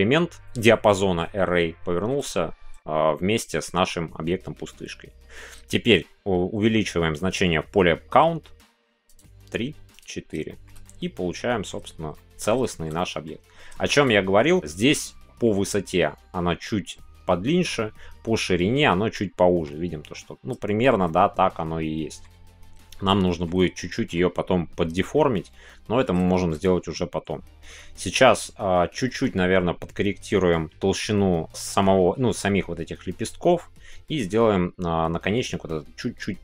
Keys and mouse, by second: 10.5 shift+middle click, 10.8 middle click, 12.1 middle click, 12.6 shift+middle click, 12.9 middle click, 13.8 shift+middle click, 19.1 middle click, 20.6 shift+middle click, 21.0-22.2 middle drag, 23.2 shift+middle click, 23.5-24.1 middle drag, 25.1-26.1 middle drag, 26.2 shift+middle click.